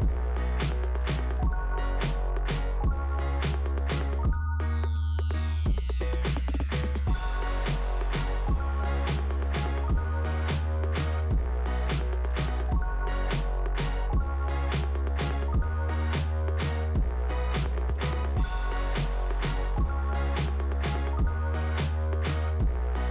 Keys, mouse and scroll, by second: 0.4 click, 0.5 click, 5.1 scroll down 2, 18.4-19.6 scroll up 2, 21.4 scroll down 1.